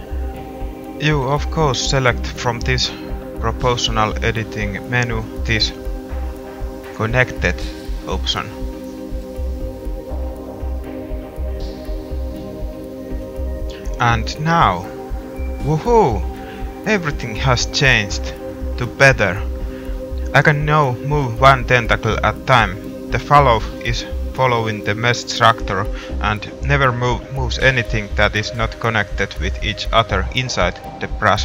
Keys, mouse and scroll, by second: 3.2-13.1 drag, 13.8 g.